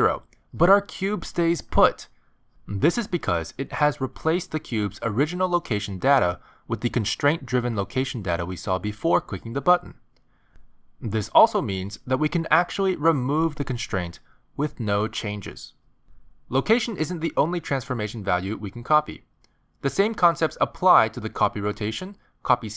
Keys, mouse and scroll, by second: 2.6 middle click, 3.8 middle click, 4.9 middle click, 7.1 middle click, 15.8 click, 18.6 middle click, 20.9 click.